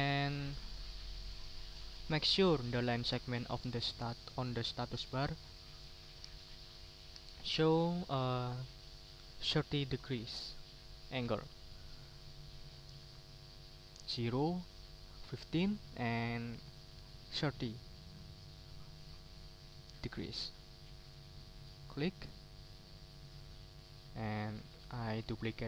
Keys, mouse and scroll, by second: 8.4 ctrl+middle click, 21.6 click, 23.0 middle click, 24.1 click, 24.7 middle click.